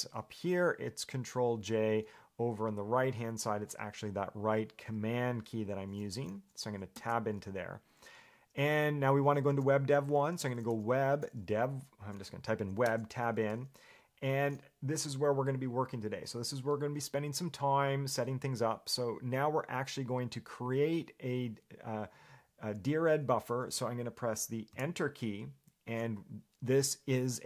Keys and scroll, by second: 10.4-11.4 typing, 13.1 Tab, 25.0 Return.